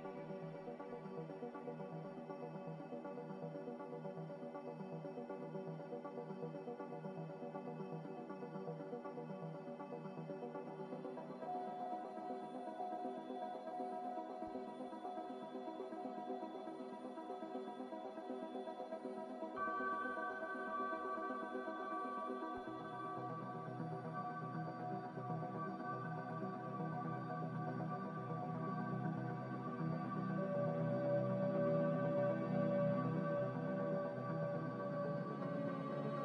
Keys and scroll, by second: 25.4-26.5 typing.